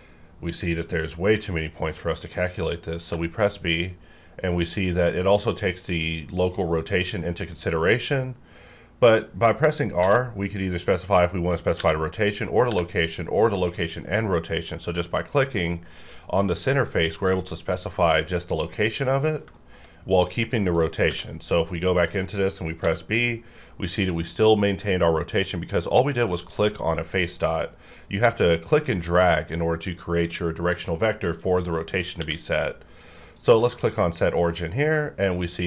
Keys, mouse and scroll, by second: 3.1 b, 10.0 b, 12.7 r, 17.0 click, 19.1 click, 19.5 shift+middle click, 20.7 click, 21.1 q, 21.9 click, 22.8 b, 27.4 right click, 28.1 click, 29.9 click, 32.2 q, 33.2 click.